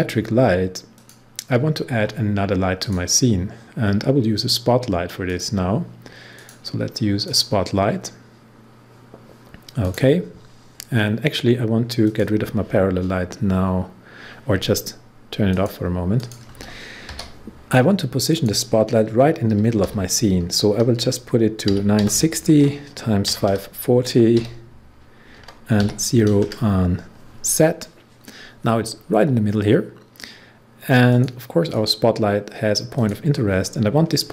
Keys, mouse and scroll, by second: 0.6-0.9 scroll up 1, 0.9 click, 5.2 click, 9.8 click, 15.4 click, 16.4 click, 17.0 p, 18.3 click, 19.8 0, 20.9-24.3 typing, 25.4 Tab, 25.7 typing, 31.0 click.